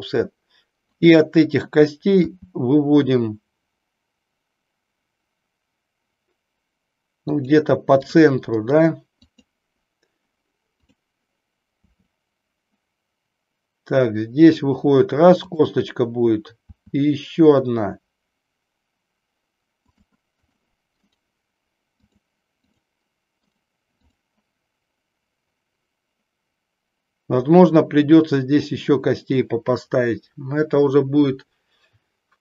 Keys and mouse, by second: 1.0 click, 7.4 click, 8.0 click, 8.8 right click, 10.6 click, 15.5 click, 20.0 click, 20.5 click, 21.1-22.3 right drag, 22.6 click, 23.4 right click.